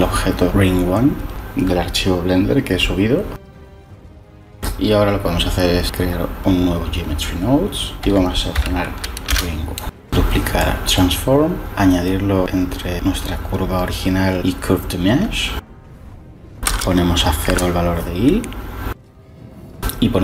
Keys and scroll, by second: 8.0 r, 8.5 i, 9.2 Return, 11.6 shift+d, 16.6 0, 17.4 Return, 19.8-20.2 typing.